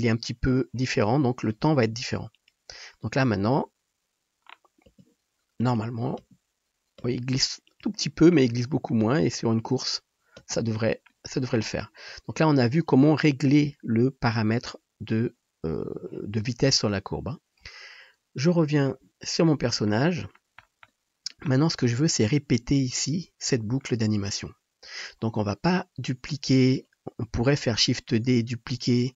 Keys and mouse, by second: 3.5 space, 5.0 space, 6.2 space, 7.2 space, 9.1 space, 10.6 space, 18.6-25.2 middle drag, 25.2-29.1 drag, 27.7 shift+d.